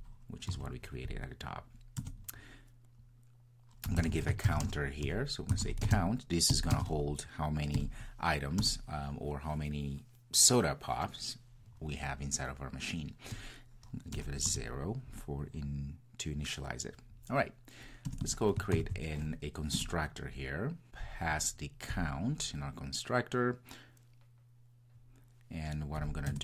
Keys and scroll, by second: 18.8 super+n.